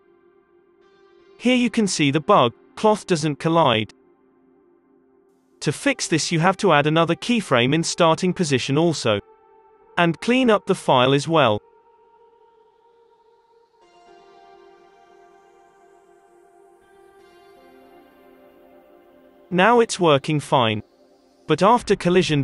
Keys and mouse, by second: 2.8 space, 3.5 Up, 5.0 Down, 5.8 i, 6.3 Down, 7.0 i, 8.7 ctrl+s, 9.1-11.1 drag, 12.5 space, 14.6 alt+a, 19.4 alt+a, 19.7 space, 20.0-21.3 drag, 20.5 middle click.